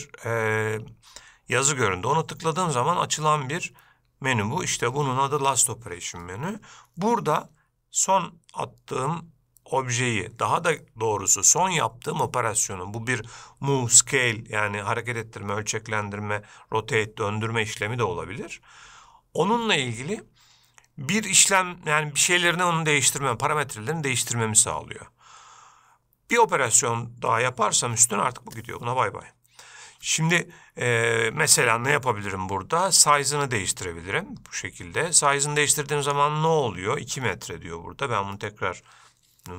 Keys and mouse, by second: 33.2-36.3 drag, 38.4 KP_2.